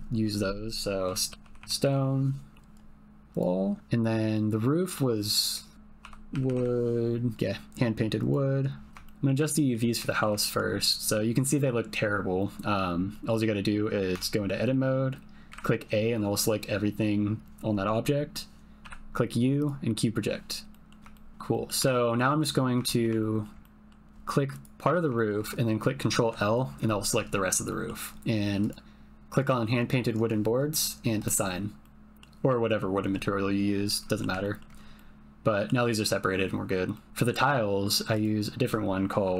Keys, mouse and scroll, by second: 3.5 middle click, 4.3 click, 6.4 o, 9.0 shift+click, 9.5 ctrl+click, 10.2 shift+click, 10.5 ctrl+click, 13.2 click, 14.1 Tab, 15.5 a, 18.8 u, 20.7 click, 21.1 shift+click, 21.3 Tab, 21.5 click, 21.8 Tab, 22.8 shift+click, 23.1 ctrl+middle click, 23.6 middle click, 23.9-24.6 scroll up 1, 24.6 click, 24.8-25.1 scroll up 1, 25.1 shift+middle click, 25.2 shift+click, 26.2 ctrl+l, 27.6 click, 28.6 click, 31.2 click, 31.8 click, 32.0 middle click, 33.9 middle click, 34.4 ctrl+middle click, 35.0 middle click, 37.0 click, 37.1 Tab, 38.1-39.3 drag.